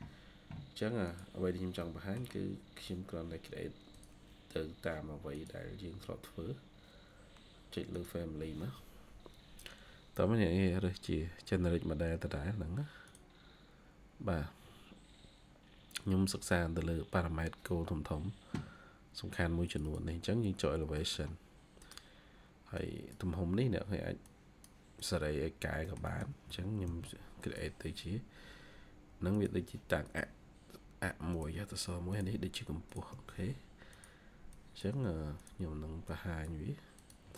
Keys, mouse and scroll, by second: 1.7 middle click, 1.8 scroll down 1, 19.7 double click, 20.9 middle click, 25.2-25.7 scroll down 1, 25.7 middle click, 25.8 scroll down 1, 26.0 middle click, 26.3-26.8 typing, 33.0 Escape, 33.2 Escape, 37.2 middle click.